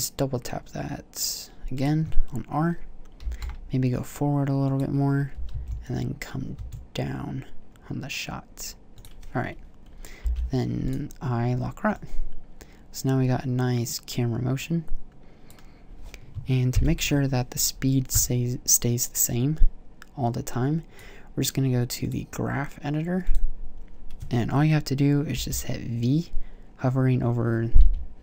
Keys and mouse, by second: 2.0-2.5 drag, 3.4 g, 4.1-5.0 middle drag, 5.6 g, 6.9 middle click, 10.4 middle click, 17.0 shift+Left, 19.5-24.2 drag, 25.6 v, 28.0 v.